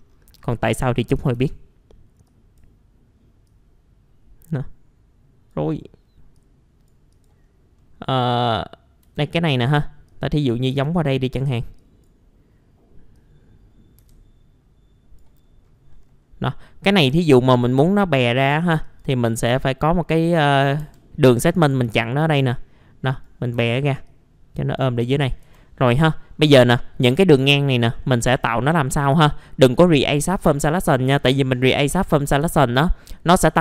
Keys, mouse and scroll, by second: 0.0-0.4 scroll down 1, 1.0 scroll up 1, 1.1-1.5 typing, 1.8-2.3 scroll up 1, 2.3-5.9 drag, 7.5 scroll up 1, 7.7 scroll down 1, 7.8 middle click, 8.4 click, 9.2-15.4 drag, 15.4 scroll up 1, 15.9 middle click, 16.2-16.9 scroll up 1, 17.1 F3, 17.4 click, 19.3 right click, 20.2 click, 20.8 F3, 21.9 r, 22.2 click, 23.5 w, 24.0 click, 25.0 middle click, 25.3 scroll down 1, 26.3-27.4 scroll up 1, 27.4 F4, 27.9 scroll down 1, 28.7 middle click, 29.0-29.9 scroll up 2, 29.1 F4, 30.1 middle click, 31.0 scroll down 1, 31.8-32.4 scroll up 1, 32.4 F4, 32.8 middle click, 33.4 F4.